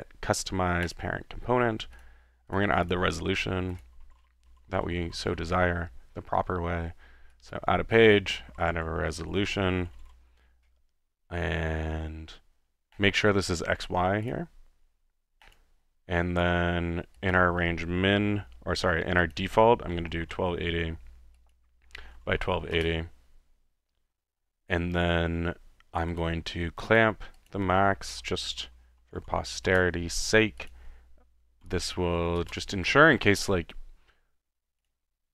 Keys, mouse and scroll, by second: 1.0 drag, 2.0 click, 2.5 click, 2.9 click, 3.7-6.6 typing, 3.7 click, 3.9 click, 7.3 click, 8.2 click, 8.2-10.5 typing, 11.5 typing, 13.0-13.8 drag, 14.2-15.7 drag, 17.2-17.6 drag, 19.2-19.8 drag, 19.6-20.7 typing, 21.6 click, 22.4 typing, 22.7 Return, 26.1-26.4 drag, 26.9-27.2 drag, 27.4-28.1 drag, 27.9-29.6 typing, 29.7 Return, 30.7 click, 31.6-32.8 typing, 34.8-35.3 drag.